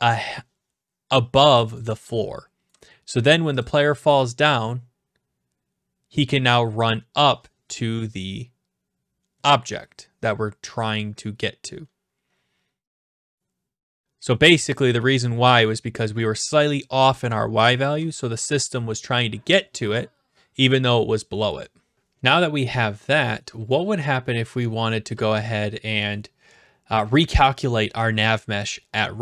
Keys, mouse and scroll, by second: 1.8-2.7 a, 2.7 right click, 3.6-4.6 drag, 23.9 a, 25.1-26.1 right drag.